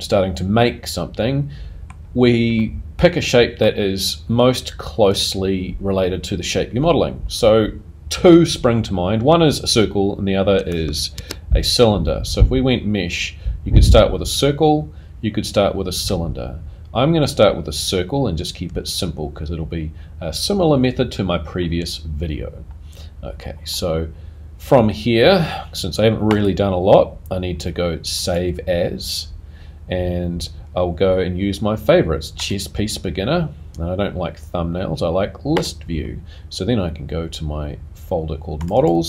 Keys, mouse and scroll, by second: 2.6 middle click, 5.1 click, 11.1 shift+a, 26.3 click.